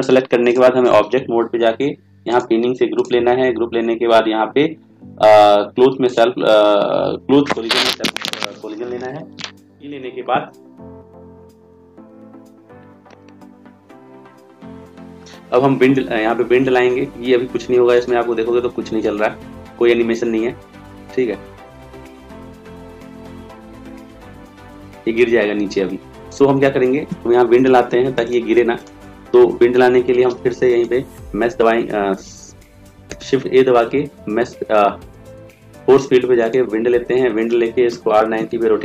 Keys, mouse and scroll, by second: 31.7 ctrl+a, 33.2 shift+a, 38.0 r.